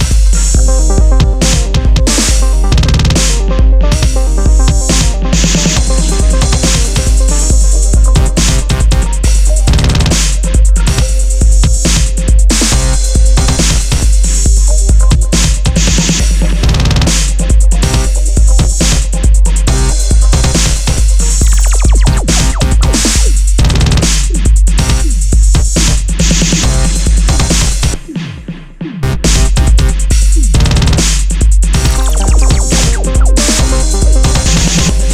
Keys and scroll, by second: 0.3 super+-, 1.4 Return, 25.1 super+d, 34.1 super++.